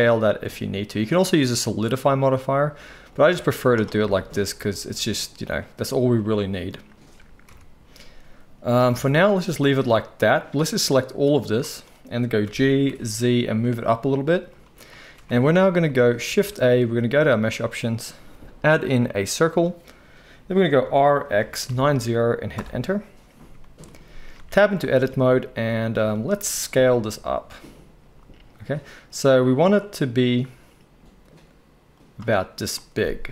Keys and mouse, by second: 1.5 Tab, 3.4-11.3 right drag, 7.5 KP_1, 8.9 alt+a, 11.3-14.6 middle drag, 12.4 g, 14.6-33.3 right drag, 15.3 alt+a, 16.3 shift+a, 20.8 r, 24.3 Tab, 26.4 s.